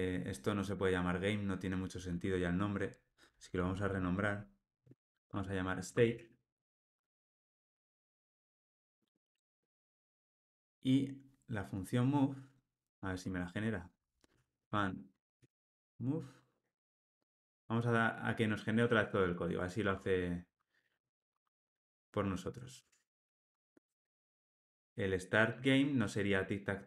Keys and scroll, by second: 4.5 shift+F6, 8.1 ctrl+alt+o, 8.5 alt+super+l, 16.7 Escape, 19.8 Tab.